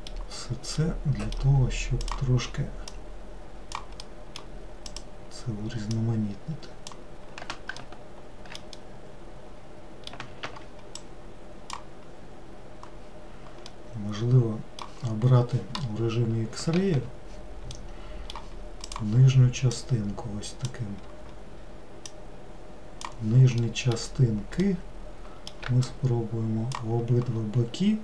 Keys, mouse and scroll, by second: 2.1 click, 3.0 click, 4.1 middle click, 4.9 click, 6.0 click, 7.9 alt+middle drag, 8.8-10.5 middle drag, 10.5 ctrl+z, 11.1 click, 13.8-16.8 middle drag, 16.8 alt+z, 17.9-19.8 middle drag, 19.8 click, 22.2 click, 23.7 alt+middle click, 24.7-26.0 middle drag, 26.0 shift+click.